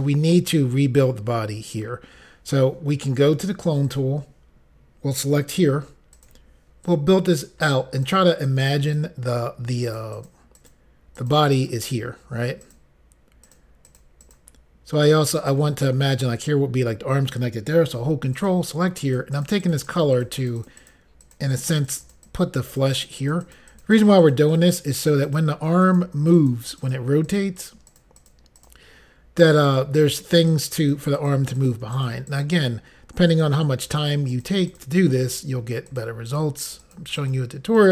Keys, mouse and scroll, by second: 3.9 click, 6.1 ctrl+click, 6.8 click, 7.7 click, 8.5 click, 9.8 click, 10.1 click, 10.3 double click, 10.6 double click, 11.2 double click, 11.6 double click, 12.6 click, 13.4 click, 13.9 click, 14.0 double click, 14.2 double click, 15.4 double click, 15.5 click, 18.4 ctrl+click, 19.0 click, 19.3 click, 19.9 click, 20.1 click, 20.4 double click, 20.6 double click, 20.7 double click, 20.8 double click, 21.2 double click, 21.4 double click, 21.5 double click, 21.8 double click, 21.9 double click, 22.0 double click, 22.2 double click, 22.7 click, 22.9 click, 23.1 double click, 23.2 click, 23.3 click, 23.4 click, 23.6 double click, 23.7 double click, 24.0 double click, 24.1 double click, 24.2 double click, 24.4 double click, 24.6 double click, 24.7 double click, 25.0 double click, 25.1 double click, 25.3 double click, 25.9 double click, 26.4 double click, 26.5 double click, 26.8 click, 27.0 double click, 27.3 click, 27.6 double click, 27.7 double click, 27.9 double click, 28.2 double click, 28.3 double click, 28.6 double click, 29.7 double click, 30.0 click, 30.5 click, 30.7 double click, 30.8 click, 31.2 click, 31.6 double click, 32.0 double click, 32.1 double click, 32.3 double click, 33.3 double click, 33.9 click, 34.3 click, 34.5 double click, 34.7 click, 35.9 double click, 36.3 click, 36.9 click, 37.2 click, 37.8 click.